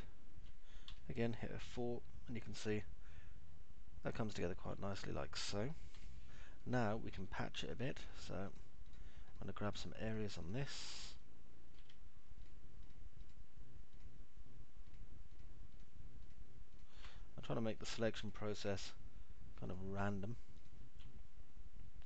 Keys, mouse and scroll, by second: 1.3 F4, 2.3-5.1 alt+middle drag, 5.4 middle click, 6.1 F4, 11.3-12.3 alt+middle drag, 14.3 ctrl+click, 15.8 ctrl+click, 16.1 ctrl+click, 17.1 ctrl+click, 17.8 alt+middle click.